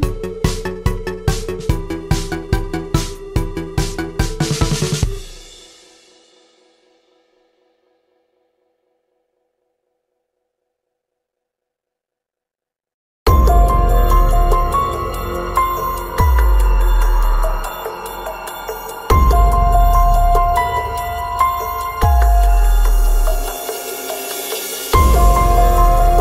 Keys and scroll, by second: 0.9 ctrl+a, 2.1 BackSpace, 2.4 BackSpace, 3.9 ctrl+a, 20.8 F8, 26.1 Escape.